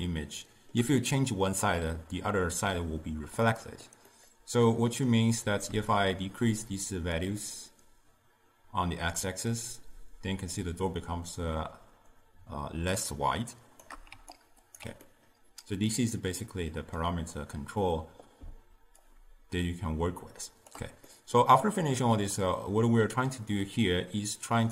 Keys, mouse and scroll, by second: 3.6-6.0 middle drag, 7.3-10.3 shift+drag, 14.2 d, 14.5 right click, 14.8 d, 15.1-18.2 middle drag, 19.1-21.2 shift+drag, 21.2-24.7 middle drag.